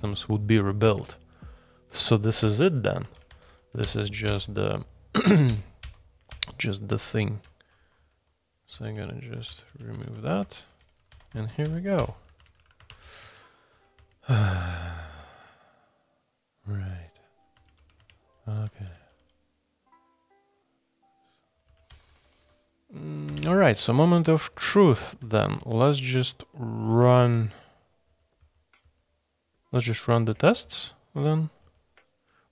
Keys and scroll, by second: 0.8 Escape, 2.4-4.2 typing, 5.5 shift+j, 5.8 shift+j, 6.3 shift+j, 6.9 Escape, 7.4-13.7 typing, 14.0 Escape, 17.5 Escape, 17.6-19.6 typing, 18.0 Escape, 21.4-25.9 typing, 27.1-27.8 typing, 28.0 ctrl+d, 28.4 ctrl+d, 28.8 ctrl+d, 29.9-30.6 typing, 31.6 ctrl+d, 32.2-32.5 typing.